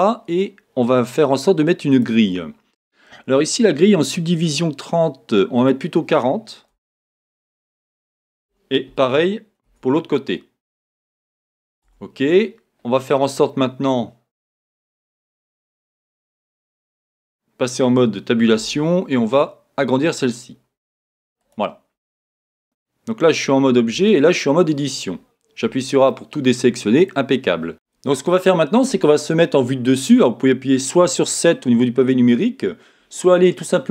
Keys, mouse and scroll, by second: 5.6-14.4 drag, 15.3 scroll, 16.0 scroll down 1, 16.6 Tab, 18.6 s, 21.5 click, 22.6 Tab, 25.6 a, 25.9 middle click, 26.3 middle click, 26.9 middle click, 27.2-27.7 scroll up 1, 27.7-33.9 drag.